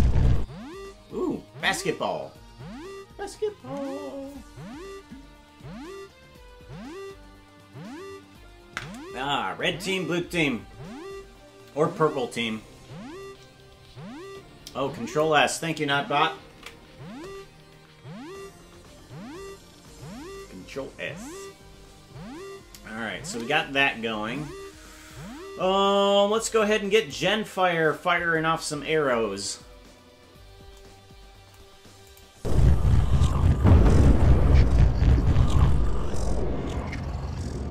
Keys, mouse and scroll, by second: 18.7 ctrl+s, 26.5 ctrl+Tab, 27.2 right click, 32.1 click, 32.3 space, 37.6 space.